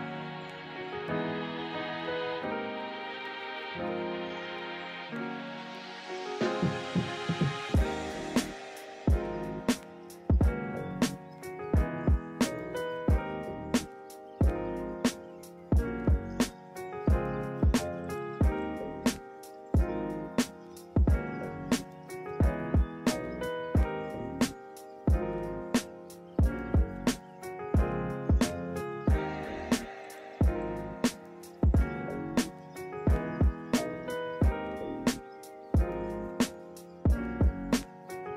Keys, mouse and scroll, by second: 0.1 right click, 4.0 ctrl+z, 7.5 ctrl+z, 8.7 ctrl+z, 22.6 ctrl+t, 37.0 b, 37.1 ctrl+-, 37.3 ctrl+=, 37.5 ctrl+-.